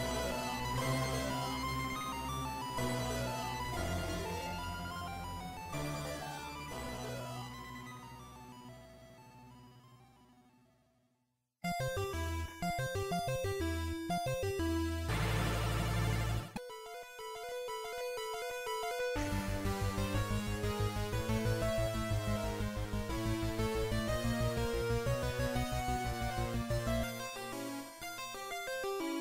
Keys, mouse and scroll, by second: 0.3-0.7 scroll up 2, 2.0 click, 4.1 click, 5.9 shift+middle click, 8.3 click, 10.5 click, 17.6 scroll up 2, 18.3 scroll down 1, 18.8 Tab, 18.8-19.3 scroll down 2, 19.7-20.2 scroll down 2, 20.0 shift+middle click, 21.4 shift+a, 27.3 s, 28.7 click.